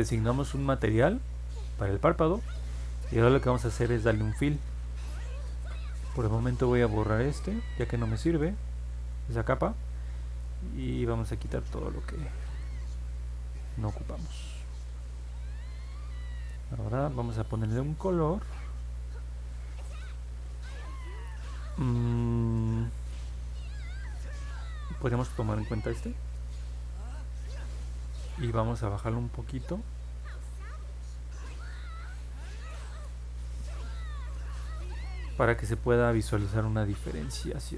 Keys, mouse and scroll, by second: 4.2 click, 5.9 click, 7.3 click, 8.1 click, 9.4 middle click, 10.8 click, 11.3 click, 12.0 click, 12.4 click, 34.4 middle click, 34.4 scroll down 1.